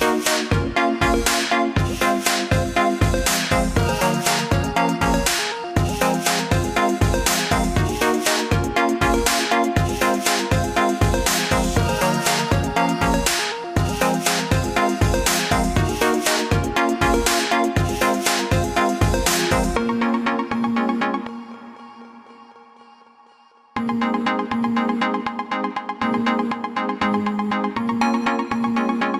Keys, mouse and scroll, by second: 9.6 click, 15.2 click, 20.6 click, 26.3 click.